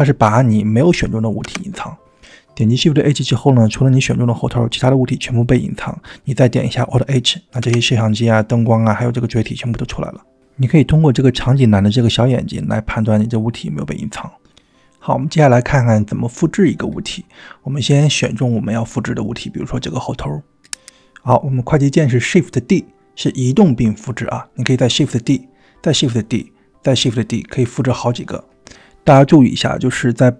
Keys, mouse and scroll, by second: 1.8 shift+h, 6.3 alt+h, 7.9 alt+h, 10.8 click, 14.7-15.0 middle drag, 15.1-15.7 shift+middle drag, 20.5 click, 22.4 shift+d, 24.2 shift+d, 27.1 shift+d, 29.6 g.